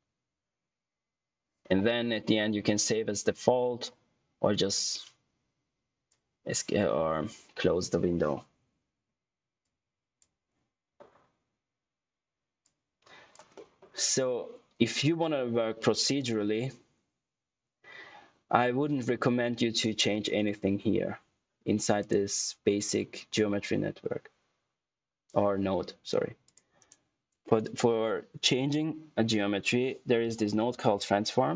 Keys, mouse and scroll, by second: 5.1 click, 9.5 click, 12.5 click, 13.5 middle click, 22.1 click, 26.4 click, 26.7 right click, 29.8-31.3 typing, 31.3 Return.